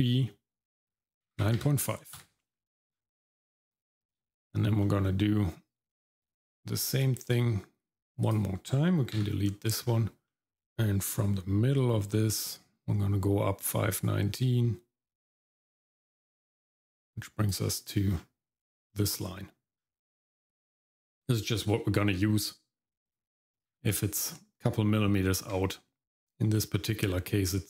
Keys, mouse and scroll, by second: 2.9-3.3 scroll down 2, 3.3 middle click, 3.6-4.8 scroll up 1, 4.8 middle click, 6.2 click, 8.2 click, 9.2 x, 9.5 middle click, 9.8-10.3 scroll up 1, 10.3 middle click, 11.8-17.5 drag, 18.1-19.8 scroll up 2, 19.8 scroll down 1, 23.1 click, 23.7 x, 24.6 Tab, 26.0 middle click, 26.0-26.5 scroll up 4.